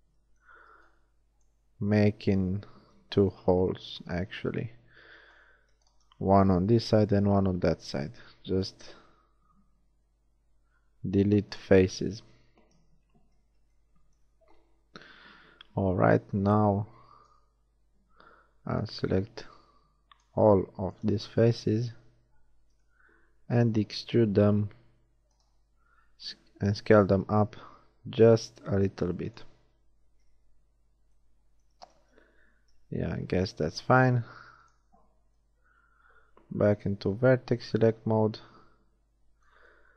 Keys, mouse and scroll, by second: 0.7 b, 2.8 z, 6.6-7.7 drag, 7.7 x, 11.3 click, 12.7 KP_1, 13.1 z, 13.7 shift+middle click, 18.5 b, 22.7 shift+KP_3, 24.9 e, 26.1 s, 30.1 KP_1, 32.5 z, 33.5 ctrl+Tab.